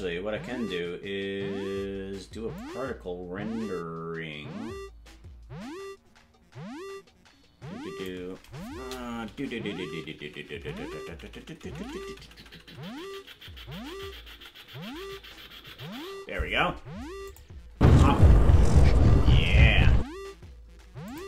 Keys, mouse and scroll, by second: 2.6-8.1 drag, 9.3-16.0 Right, 17.3 click, 17.7 space, 19.9 space, 21.1 click.